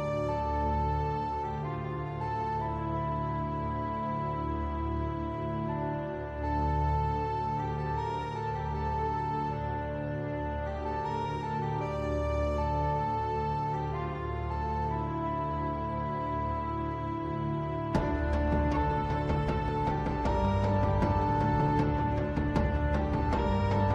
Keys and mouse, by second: 0.3-0.9 middle drag, 2.2-4.7 middle drag, 8.3-9.0 drag, 9.4 shift+click, 11.0 ctrl+p, 13.5 middle drag, 15.6 shift+d, 21.0 t.